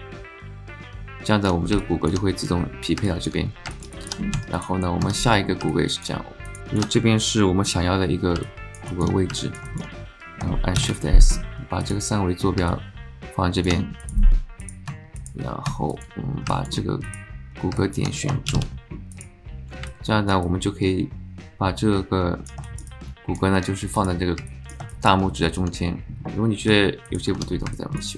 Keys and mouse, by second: 0.7 alt+click, 1.8 alt+click, 3.0 alt+click, 3.7 alt+shift+click, 3.9 alt+middle click, 4.4 Tab, 4.5 click, 5.7 alt+click, 6.5 alt+click, 6.6 alt+z, 7.9 z, 8.4-8.8 alt+drag, 8.9 alt+shift+click, 9.4 alt+middle click, 9.7 shift+middle click, 10.8 shift+s, 12.7 alt+click, 14.9 Tab, 15.9 click, 16.5 alt+click, 17.1 click, 17.7 alt+shift+click, 18.5 shift+s, 19.8 alt+click, 20.4-22.5 alt+drag, 22.6 shift+click, 22.9-23.4 drag, 24.5 alt+middle drag, 24.9 shift+middle click, 25.3 alt+middle click, 25.9 middle click, 26.7 Tab, 27.0 click, 27.7 alt+click.